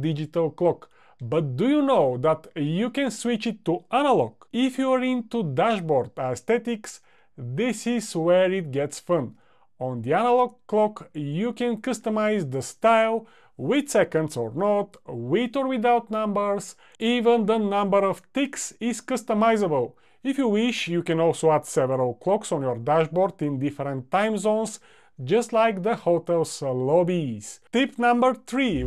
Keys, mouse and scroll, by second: 9.4 click, 11.2 click, 12.0 click.